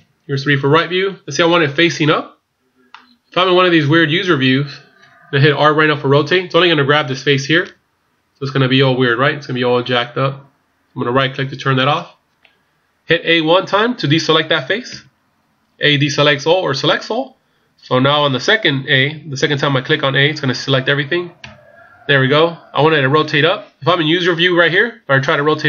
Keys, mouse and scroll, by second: 2.9 middle click, 7.7 r, 14.9 a, 21.5 a.